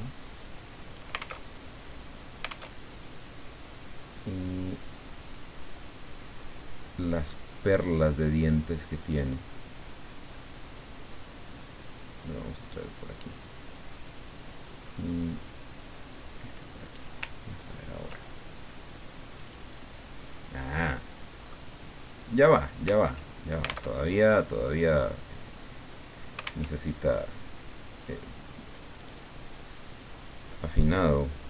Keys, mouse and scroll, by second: 1.5 alt+Tab, 2.7 alt+Tab, 4.4 click, 7.5 click, 8.6 click, 10.3-14.0 drag, 14.6-17.2 drag, 17.4-17.8 ctrl+scroll down 2, 19.4 click, 21.0-22.1 middle drag, 23.9 alt+Tab, 26.7 alt+Tab, 29.0 click, 30.6 click.